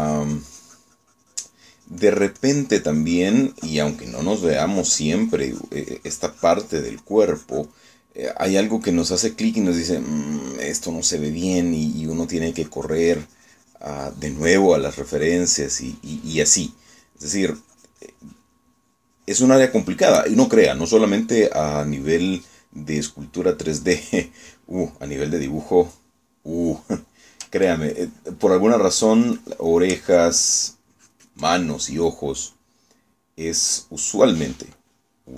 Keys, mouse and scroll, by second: 13.6-21.2 drag, 29.0-31.0 ctrl+drag, 31.1 ctrl+click, 31.9 ctrl+middle click, 32.0 ctrl+click, 32.6-35.3 ctrl+middle drag.